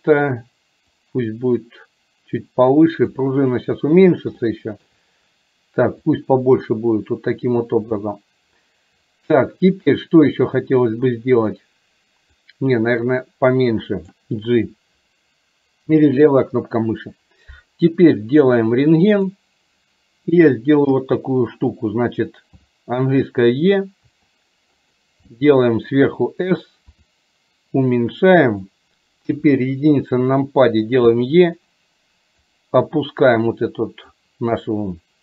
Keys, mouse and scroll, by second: 1.0-3.2 drag, 4.5 shift+middle click, 6.1-8.0 drag, 12.5-14.1 drag, 25.5 middle click, 32.5-34.2 drag.